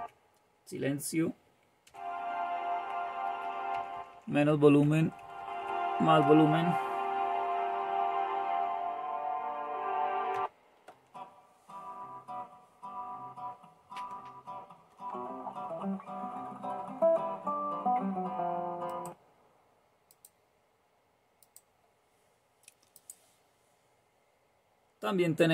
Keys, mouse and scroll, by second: 14.8 super+2, 18.9 click, 20.3 click, 21.4 click, 23.0 click.